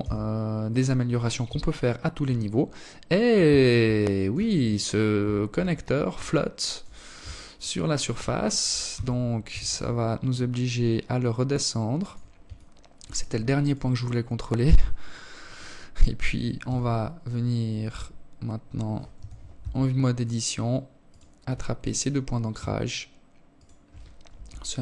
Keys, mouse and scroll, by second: 2.3 alt+shift+click, 2.9-3.8 scroll up 3, 3.8-4.2 scroll up 4, 4.3 scroll down 1, 5.9 alt+shift+click, 7.3 g, 10.9 alt+click, 12.0 right click, 14.9 z, 17.5 z, 17.9 Tab, 19.4 right click, 21.9 shift+right click, 22.6 KP_3.